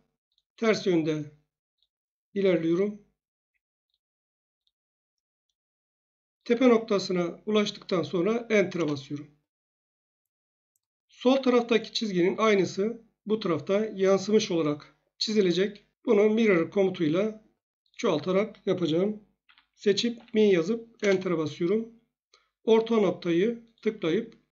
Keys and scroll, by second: 8.7 Return, 16.3 Escape, 19.4-20.1 typing, 21.0 Return.